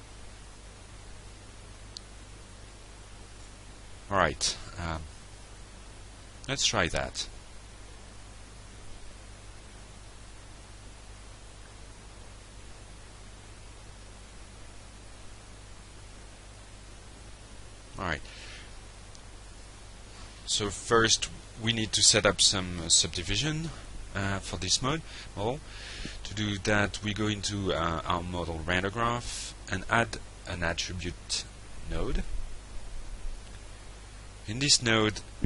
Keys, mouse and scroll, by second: 0.1 alt+click, 0.6 alt+middle drag, 1.0 alt+scroll up 1, 1.5 alt+click, 1.9-2.5 alt+scroll up 1, 2.6 alt+click, 3.3 alt+middle click, 4.2 alt+scroll up 1, 4.7-5.1 alt+middle drag, 5.3 alt+right click, 6.3 alt+middle click, 7.3-8.4 alt+drag, 8.6 alt+click, 9.7 ctrl+r, 13.2 middle click, 13.8 click, 15.8 click, 17.6 alt+Tab, 21.0 click, 24.6 click, 25.5 middle click, 26.7-27.4 drag, 27.6 click, 28.1 ctrl+space, 28.5 a, 29.8 click, 30.7-32.2 drag, 32.4-33.2 drag, 33.4 click, 34.7 click.